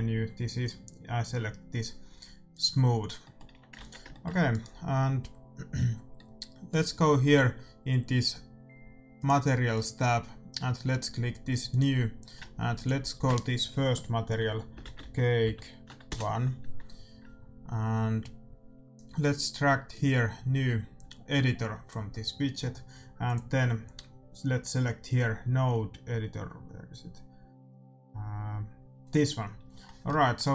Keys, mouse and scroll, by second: 2.4-4.3 drag, 2.9-9.1 middle drag, 3.4 a, 3.7 ctrl+s, 4.4-6.3 right drag, 9.1-11.1 drag, 11.6-14.7 drag, 19.8-21.8 drag, 23.2-25.1 drag.